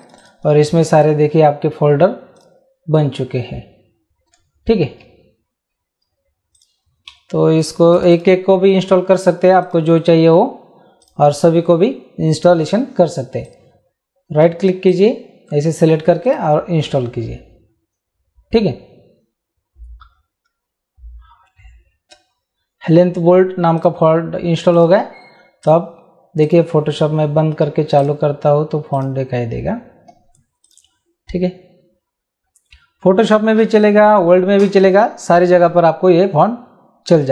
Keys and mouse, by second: 0.0 click, 2.4 click, 6.5 click, 7.1 BackSpace, 8.0 click, 9.7 click, 11.0 click, 13.5 click, 14.9 right click, 16.3 click, 23.8 click, 28.0 click, 30.7 click, 33.4 click.